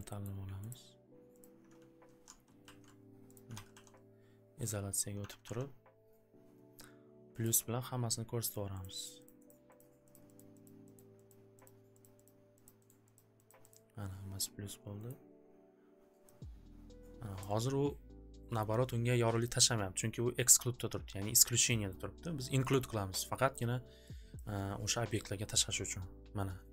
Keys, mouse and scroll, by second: 0.2 scroll up 1, 0.7 ctrl+click, 1.0 scroll, 1.4 ctrl+click, 2.3 alt+w, 2.3 alt+w, 2.6 alt+й, 3.3 click, 3.6 alt+ц, 4.6 click, 5.3 alt+ц, 7.4 click, 8.5 click, 8.9 click, 9.0 click, 9.3 click, 9.5 click, 9.8 click, 10.1 click, 10.3 click, 10.6 click, 10.9 click, 11.2 click, 11.8 click, 12.0 click, 12.2 click, 12.7 click, 12.8 click, 13.2 click, 13.4 click, 13.7 click, 15.0 right click, 17.4 click, 20.2 click, 20.8 click, 21.9 click, 22.8 click, 24.3 click.